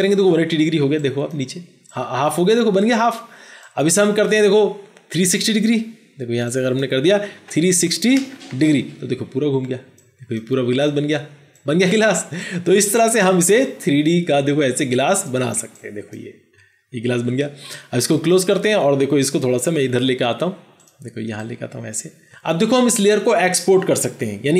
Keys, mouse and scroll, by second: 7.3-8.4 typing, 8.4 Return.